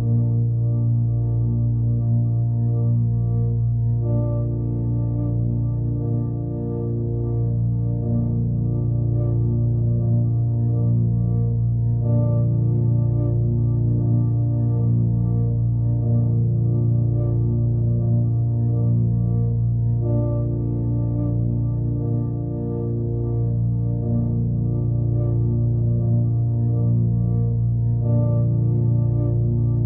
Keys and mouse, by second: 0.6 middle click, 1.5 click, 1.8-2.4 alt+middle drag, 3.1 shift+d, 6.0 drag, 6.8-9.9 drag, 10.6-11.8 alt+middle drag, 12.4 ctrl+a, 13.1-13.4 alt+middle drag, 14.4-15.5 alt+middle drag, 19.4 s, 22.5 alt+middle click, 23.5 g, 25.0 alt+drag, 26.2-26.6 alt+drag, 27.0 shift+d, 28.1 r, 28.8 alt+middle click.